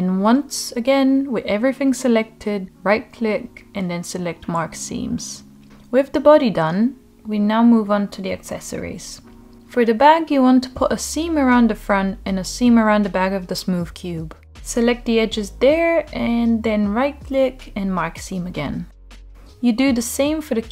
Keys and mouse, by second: 2.5-3.8 right drag, 4.0 Tab, 6.5 alt+h, 7.7-8.0 middle drag, 8.3 click, 9.6 click, 10.2 middle click, 10.4 Tab, 10.9 middle click, 11.7 click, 12.3 shift+middle click, 12.5 middle click, 13.4 middle click, 14.2 shift+click, 14.4 middle click, 15.2 middle drag, 15.6-16.1 right drag, 16.4 middle click, 16.7 middle click, 17.1 Tab, 17.5 Tab, 17.8 Tab, 18.1 middle click, 18.6 drag, 18.9 shift+click, 19.1 right click, 20.0 Tab, 20.5 Tab.